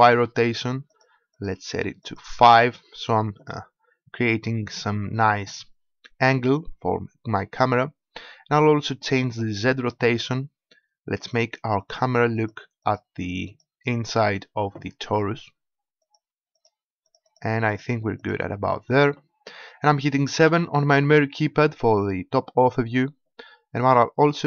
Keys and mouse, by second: 9.7-15.3 drag, 16.0-19.8 drag, 20.4 KP_7.